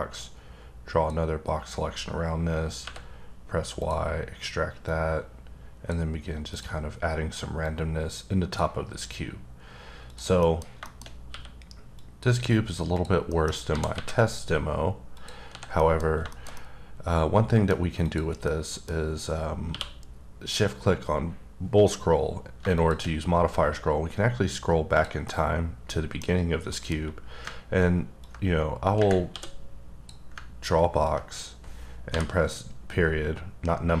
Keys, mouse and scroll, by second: 2.8 y, 3.8 click, 4.9 click, 6.6 click, 7.6 click, 10.0 click, 10.4 middle click, 11.0 scroll up 2, 11.3 q, 12.2 click, 12.5-12.9 scroll down 1, 12.9 click, 13.3 middle click, 13.7 g, 13.9 y, 15.1 click, 15.5 h, 15.8 middle click, 16.0 scroll down 2, 16.3 middle click, 16.5 double middle click, 18.0 click, 18.4 middle click, 19.7 q, 22.6 shift+Num_Lock, 22.7 shift+click, 23.2-23.6 scroll up 5, 23.8-24.9 scroll down 6, 24.9 click, 25.2 middle click, 26.7 middle click, 28.2 ctrl+click, 29.3 d, 31.0 ctrl+click.